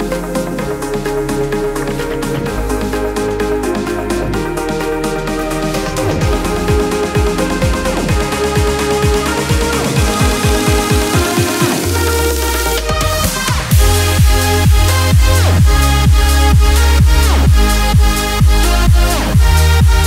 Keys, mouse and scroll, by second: 1.5 shift+Left, 2.6 Down, 3.8-5.5 drag, 5.9 space, 5.9 click, 6.4 space, 7.2 click, 7.6 space, 8.4 click, 14.4 b, 16.2-20.0 drag.